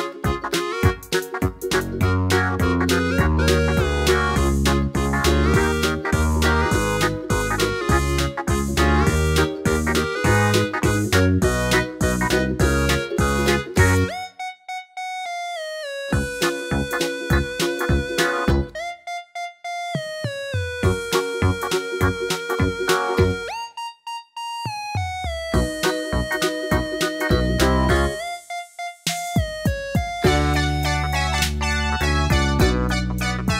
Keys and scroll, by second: 13.5 super+d, 19.3 9, 19.6 Return, 28.3 d.